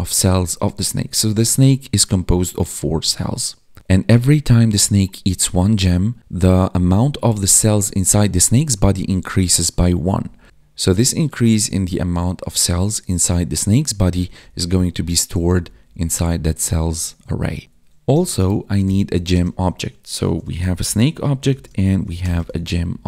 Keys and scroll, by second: 10.0 Up, 10.2 Left, 10.5 Right, 14.1 Up, 14.2 Left, 17.6 ctrl+s, 19.2 space, 21.0 space, 21.4 space, 22.4 ctrl+s, 22.9 ctrl+Down.